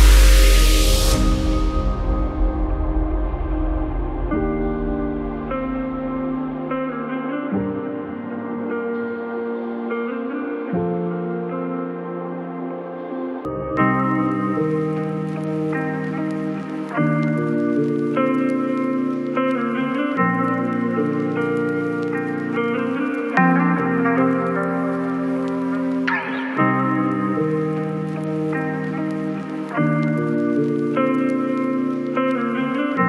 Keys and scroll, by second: 9.2 KP_Subtract, 9.5 KP_1, 9.7 KP_7, 11.9 BackSpace, 12.5 KP_Subtract, 12.8 KP_2, 14.7 KP_7.